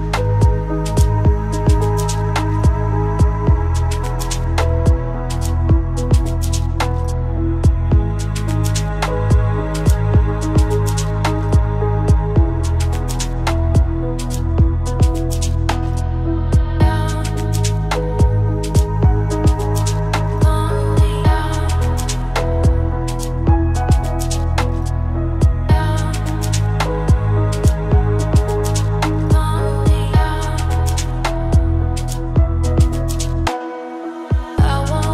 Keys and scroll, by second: 7.9 ctrl+space, 14.2 ctrl+g.